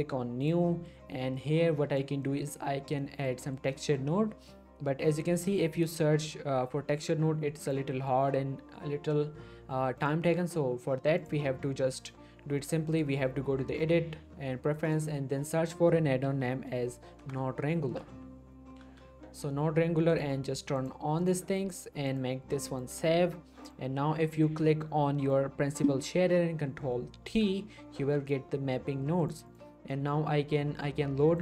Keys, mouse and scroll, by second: 0.0 click, 0.7 middle click, 1.4-2.0 click, 2.2 middle click, 3.0 middle click, 3.2-3.7 scroll up 2, 3.4 shift+middle click, 3.7 middle click, 5.3 shift+a, 5.5 shift+click, 7.6 click, 10.0 click, 14.8 click, 16.2 w, 17.8-18.8 typing, 20.1 click, 23.8-25.4 drag, 27.3 ctrl+t, 28.0 g, 29.2 click, 29.7 middle click, 30.0 scroll up 1, 30.8-31.3 scroll up 1, 31.3 click.